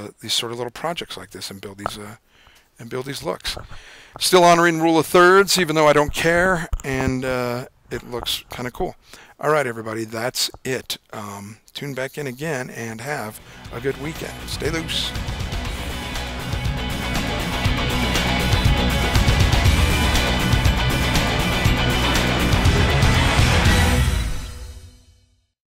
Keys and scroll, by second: 16.3 typing.